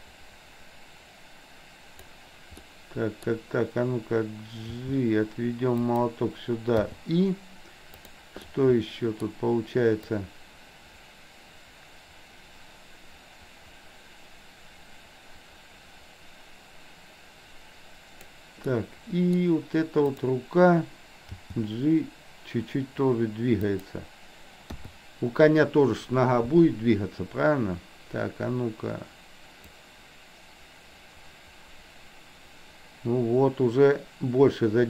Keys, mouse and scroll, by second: 2.7-3.3 middle drag, 4.8 g, 6.9 i, 8.0 drag, 8.5-9.3 middle drag, 10.2-18.3 drag, 18.8-19.4 middle drag, 20.0 click, 21.4 g, 24.8 i, 29.8-34.8 drag.